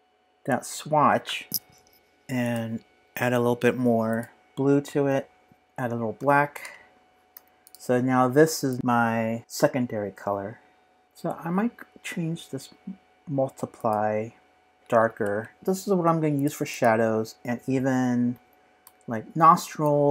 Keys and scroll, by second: 5.1 super+a, 5.5 Return, 5.9-7.3 typing, 10.7-11.5 typing, 14.8 typing, 15.2 Return.